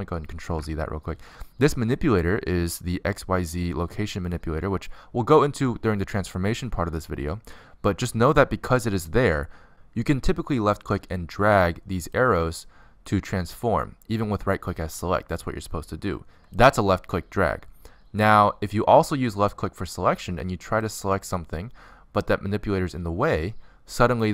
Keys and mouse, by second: 1.3 ctrl+z, 4.7 middle click, 7.7 middle click, 9.6-12.9 middle drag, 12.9-14.6 drag, 15.5 click, 15.7-17.2 drag, 17.0 ctrl+z, 17.6 ctrl+z, 19.8 click, 22.0-24.3 drag.